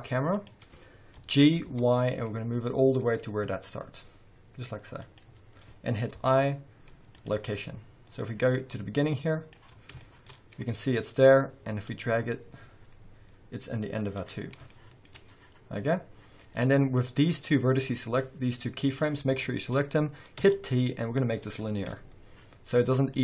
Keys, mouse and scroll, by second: 0.3 click, 1.2 g, 6.1 i, 8.2-10.0 drag, 10.0-11.8 shift+middle drag, 10.3-11.2 scroll up 2, 11.2-11.8 scroll up 1, 11.8-14.7 drag, 14.4-14.7 scroll down 1, 14.7-17.8 shift+middle drag, 16.9 scroll down 2, 17.2-17.8 scroll up 2, 17.8 drag, 20.4 t, 23.1-23.2 drag.